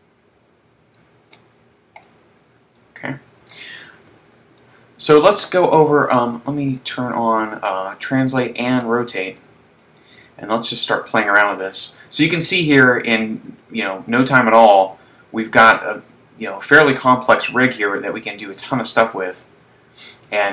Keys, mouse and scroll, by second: 2.1 right click, 2.8 middle click, 4.2 z, 4.6 shift+middle click, 6.8 click, 8.4 shift+click, 9.8 shift+middle click, 11.1 click, 18.7 click.